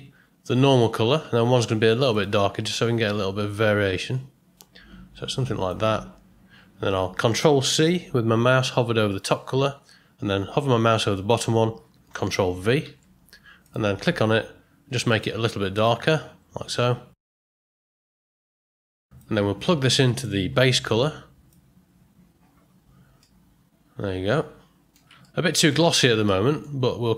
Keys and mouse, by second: 9.5 ctrl+c, 12.9 ctrl+v, 13.6 click, 20.1-21.5 drag, 23.2-24.9 middle drag, 25.2-25.6 ctrl+middle drag, 26.3 middle click.